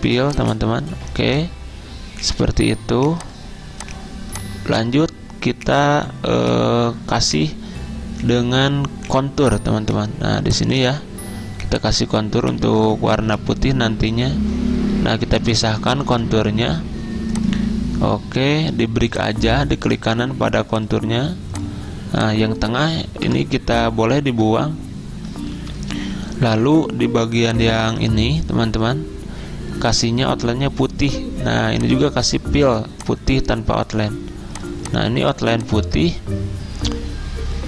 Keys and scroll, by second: 23.3 End, 24.3 End, 25.6 Delete.